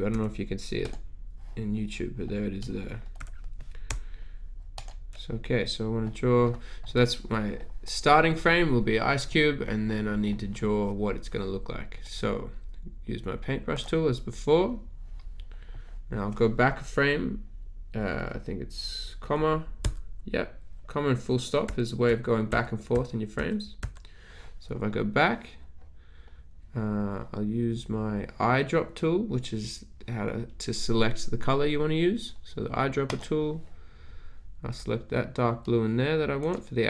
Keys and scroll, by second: 0.2 z, 3.1 z, 19.8 ,, 21.7-23.7 typing.